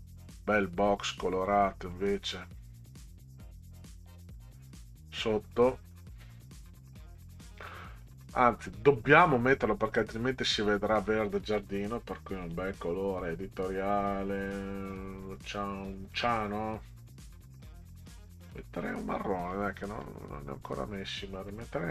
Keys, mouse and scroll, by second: 1.9-5.2 drag, 12.4 click, 16.1 click, 18.8 click, 21.6 Down, 21.7 Down.